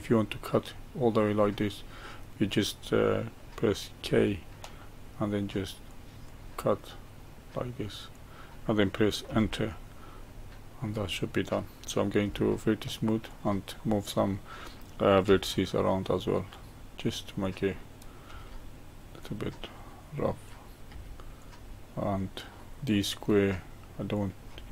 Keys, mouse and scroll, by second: 4.0 k, 10.2-12.2 right drag, 12.2 1, 13.3 click, 13.8-15.3 middle drag, 15.3 g, 17.4 click, 18.3 g, 20.5 click, 20.9 g, 22.6-24.1 middle drag, 24.1 click, 24.5 g.